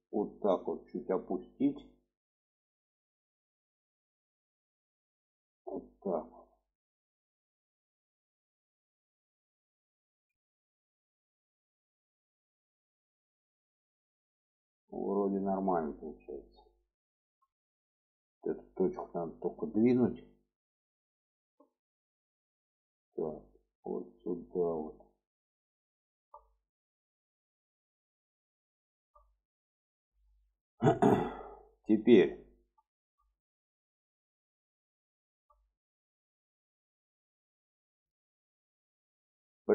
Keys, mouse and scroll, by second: 1.8 shift+middle click, 2.5 click, 3.7 click, 8.1 click, 9.1 middle click, 10.1 alt+z, 10.5 middle click, 11.4 middle click, 14.6 middle click, 15.7 alt+middle click, 17.5 shift+middle click, 18.6 click, 19.7 shift+middle click, 21.1-22.4 ctrl+drag, 23.3-25.1 drag, 25.8 shift+middle click, 26.8 middle click, 27.7 click, 28.2 middle click, 28.7 shift+middle click, 29.4 middle click, 30.1-32.5 middle drag, 32.7 shift+middle click, 33.1 middle click, 34.0 middle click, 35.0 shift+middle click, 36.3-37.5 middle drag, 37.8 shift+middle click.